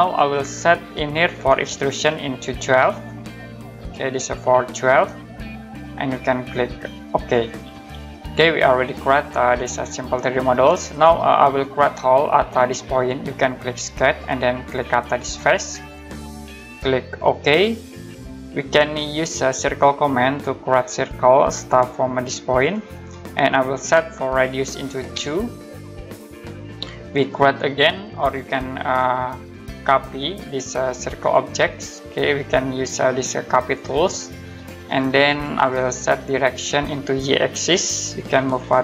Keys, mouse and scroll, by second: 1.1 click, 2.3-3.2 typing, 3.5 click, 5.0 right click, 7.2 click, 8.4 middle click, 8.8-9.5 scroll up 1, 9.5 right click, 11.3-12.4 scroll up 1, 14.0 click, 15.8 click, 18.4 middle click, 19.4 scroll up 1, 20.9 click, 21.5 scroll up 1, 22.5 click, 25.1 typing, 26.1 click, 26.9 middle click, 29.6 Escape, 31.2 click, 36.7 click.